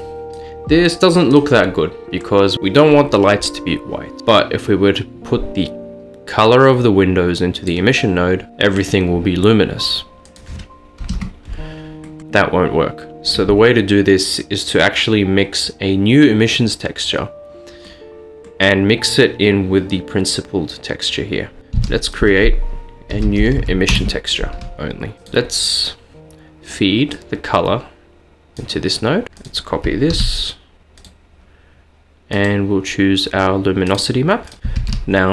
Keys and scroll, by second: 11.1 Return, 21.8 a, 23.2-23.8 typing, 24.0 Return, 30.1 d, 34.8 a.